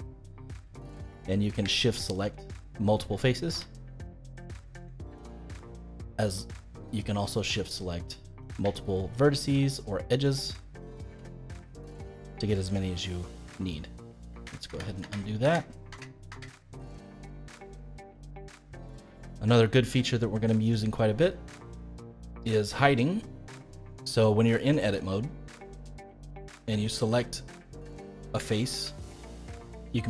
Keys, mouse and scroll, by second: 1.1 middle click, 2.0 shift+click, 2.5-3.5 middle drag, 3.5 g, 5.1-6.9 middle drag, 6.9-8.4 drag, 9.1 shift+click, 10.1 shift+click, 11.0 g, 13.0 scroll down 1, 13.2-14.3 middle drag, 14.3 ctrl+z, 14.6 ctrl+z, 15.0 ctrl+z, 15.4 ctrl+z, 15.9 ctrl+z, 16.3 ctrl+z, 17.0-18.7 middle drag, 18.7-19.1 scroll up 2, 19.1-26.9 shift+middle drag, 26.9 click, 27.3-28.5 middle drag, 28.5 shift+click, 28.9-30.0 middle drag.